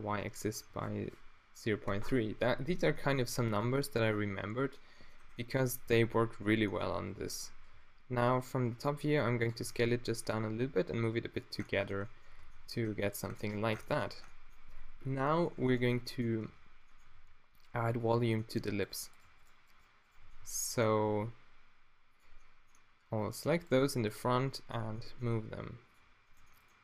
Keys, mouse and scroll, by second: 2.9 g, 3.6-6.3 drag, 7.0 z, 7.4 s, 8.6 click, 9.5 click, 9.6 g, 11.6 middle click, 12.3 Tab, 12.5 middle click, 12.8 z, 14.0 a, 16.4 Tab, 17.1 ctrl+r, 18.8-20.2 middle drag, 20.2 middle click, 20.3-22.1 drag, 21.1 g, 23.6 middle click, 23.9 q, 25.4 g, 25.9 click.